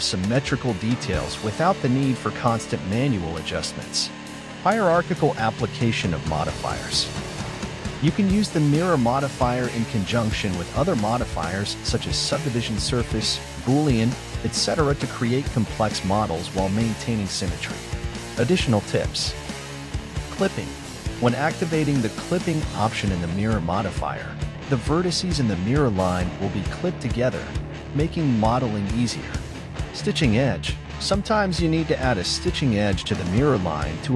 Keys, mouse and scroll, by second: 3.2 KP_1, 3.6-3.9 scroll up 4, 4.1 shift+middle click, 4.6-5.9 scroll up 9, 5.9 Tab, 6.6 shift+middle click, 7.0 a, 8.5 g, 10.9 click, 12.5 g, 15.7 click, 16.8 g, 19.5 click, 20.2 g, 23.3 click, 24.3 g, 26.4-29.9 drag.